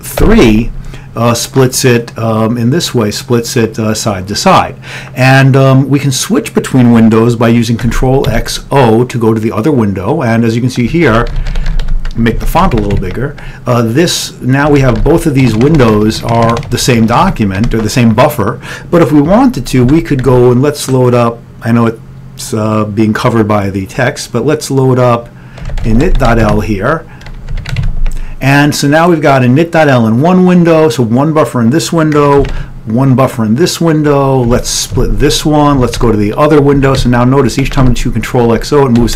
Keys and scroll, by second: 0.3 3, 8.0 ctrl+x, 8.3 o, 11.0-15.2 typing, 12.5 ctrl+=, 12.8 ctrl+x, 13.0 ctrl+=, 20.0 ctrl+x, 20.3 ctrl+f, 25.6-26.4 typing, 26.5 Return, 27.6 ctrl+x, 27.8 ctrl+=, 30.4 typing, 32.6 ctrl+x, 32.8 o, 34.6 ctrl+x, 35.8 ctrl+x, 35.8 2, 37.7 ctrl+x, 37.7 o.